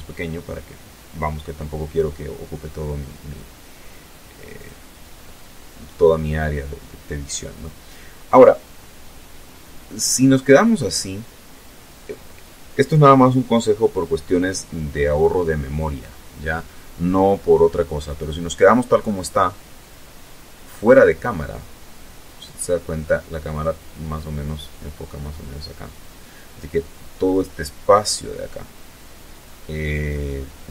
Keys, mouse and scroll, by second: 2.7 click, 7.4-7.9 scroll down 1, 8.7-9.7 scroll down 4, 17.2-19.6 middle drag, 29.3 right click.